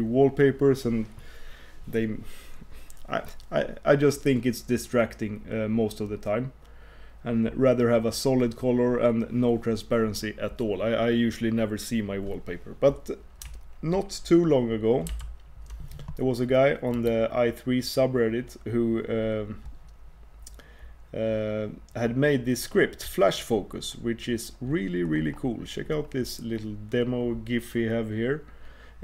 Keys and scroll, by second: 15.1 super+f.